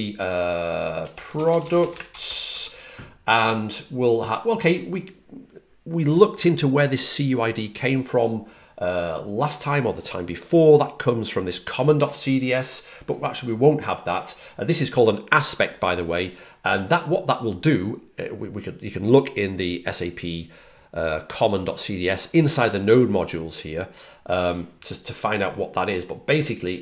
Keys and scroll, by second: 1.3-2.9 typing, 22.2 typing.